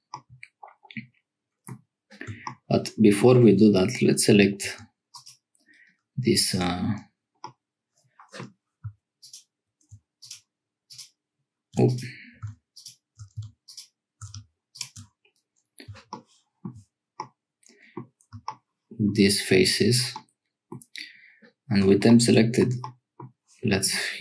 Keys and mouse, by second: 0.3-1.7 middle drag, 4.6 3, 7.4-8.4 drag, 11.8 click, 17.2 middle click, 20.1 middle click, 22.8 click.